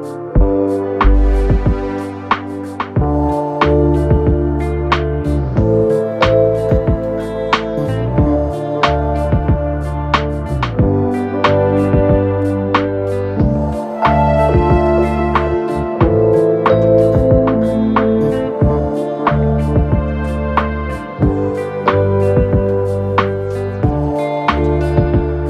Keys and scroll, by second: 13.3 shift+h, 14.2 a, 15.4 p, 15.7 p, 16.7 y, 17.6 Return, 18.5 v.